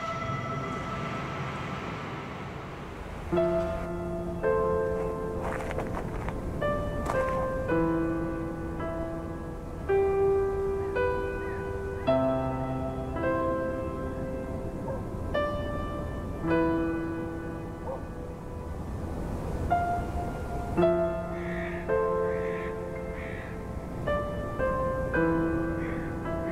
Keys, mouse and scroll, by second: 1.2-2.0 middle drag, 2.0 KP_1, 2.4 KP_3, 2.9-3.7 scroll up 10, 3.9 g, 5.4 e, 6.9 a, 7.1 a, 7.5 click, 8.0 Tab, 8.5 a, 9.0 e, 11.4-11.7 scroll down 6, 11.9 Tab, 12.1-13.4 middle drag, 13.4 KP_1, 13.9 KP_7, 14.7-15.3 scroll down 1, 15.3 shift+d, 18.5 KP_1, 18.9 KP_3, 19.6 KP_1, 21.3 ctrl+KP_1, 22.1 scroll up 1, 22.5 r, 24.5-25.0 scroll up 5, 25.3 g.